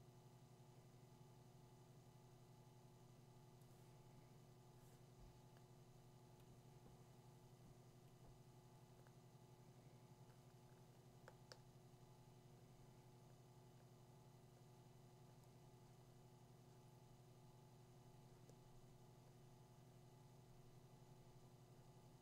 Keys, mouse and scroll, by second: 11.2 f.